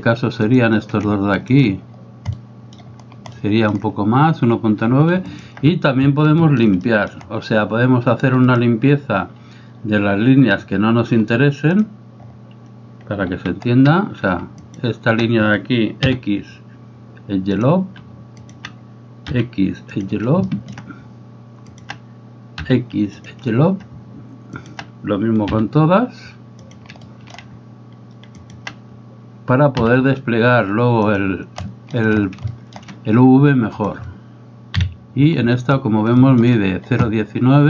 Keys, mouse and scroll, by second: 0.5 right click, 1.5 shift+right click, 2.4 middle click, 3.4 shift+middle click, 5.4 alt+right click, 6.4 shift+middle click, 6.8 middle click, 8.5-12.0 drag, 13.4 a, 14.7 alt+right click, 16.1 x, 18.5 alt+right click, 20.4 shift+middle click, 21.7 right click, 22.7 x, 24.6 alt+right click, 25.5 x, 27.1-27.4 shift+middle drag, 28.4 alt+right click, 29.8 x, 31.6-32.0 shift+middle drag, 32.6 shift+middle click, 33.9-34.7 right drag, 34.7 KP_Decimal, 36.2 shift+middle drag.